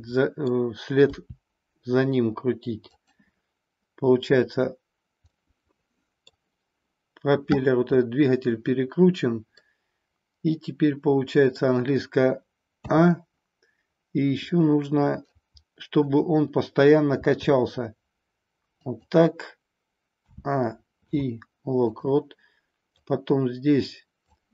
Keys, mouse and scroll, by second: 1.2 r, 3.0 click, 5.3-6.4 middle drag, 9.5-11.5 middle drag, 12.8 a, 15.3-16.0 middle drag, 17.0 r, 18.9 click, 20.2 a, 21.0 i, 22.9-24.4 drag.